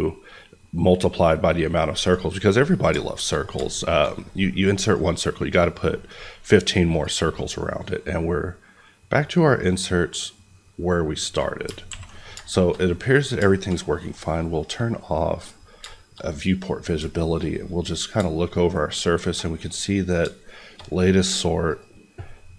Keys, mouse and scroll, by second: 1.3 scroll down 1, 1.9 click, 2.4 middle click, 4.8 click, 11.8 alt+a, 12.2-12.5 scroll, 12.5 middle click, 13.1 middle click, 13.5 shift+middle click, 15.3 click, 15.9 shift+middle click, 16.8 scroll up 1, 17.1 middle click, 18.4 shift+middle click, 19.3-20.3 shift+scroll up 2, 20.3 middle click, 21.6 click.